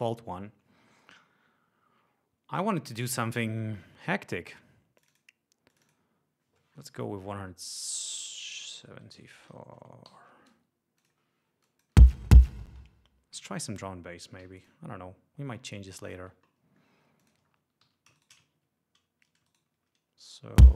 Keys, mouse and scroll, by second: 5.0 click, 5.7 click, 7.7 click, 8.9 1, 9.2 7, 10.1 4, 11.0 click, 11.6 click, 12.0 space, 12.7 space, 13.3 d, 14.4 g, 14.6 click, 15.6 shift+middle click, 16.4 ctrl+shift+middle click, 17.2 ctrl+click, 17.4 ctrl+scroll up 2, 17.8 ctrl+e, 18.2 ctrl+shift+right click, 18.5 ctrl+shift+scroll down 2, 20.6-20.7 drag.